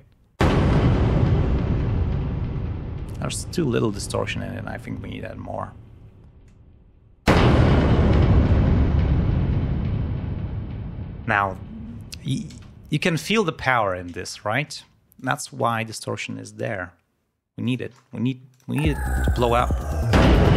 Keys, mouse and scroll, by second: 3.7 click, 12.7 space, 15.1 click, 16.6 click, 17.6 ctrl+click, 18.0 ctrl+scroll down 2, 18.5 ctrl+click, 18.7 ctrl+space.